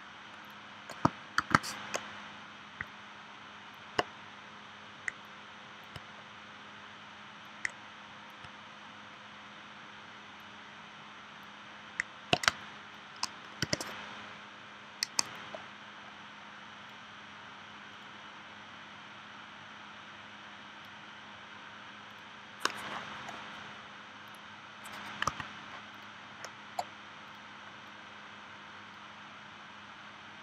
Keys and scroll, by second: 1.4 shift+w, 12.4 space, 13.6 v, 25.3 a.